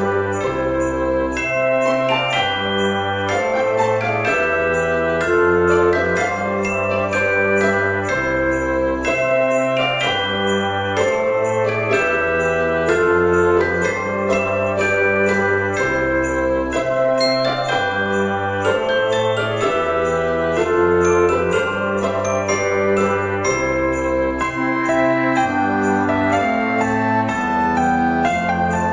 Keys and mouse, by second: 0.3 middle click, 1.0 click, 1.5 alt+shift+click, 2.9 alt+shift+click, 4.2 e, 5.3 z, 7.7 click, 8.2 middle click, 9.3 middle click, 10.6 middle click, 11.9 shift+middle click, 13.2 click, 13.7 middle click, 14.6 click, 15.8 middle click, 17.4 shift+middle click, 19.7 e, 22.5 click, 23.2 shift+middle click, 25.8 e, 26.1 s.